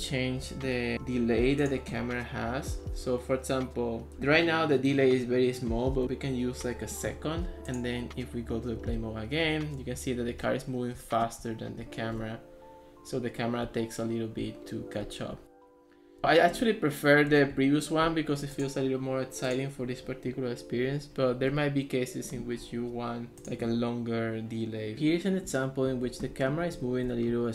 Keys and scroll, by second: 6.0 Return, 8.6-10.0 typing, 13.7-17.6 typing, 25.0-27.5 typing.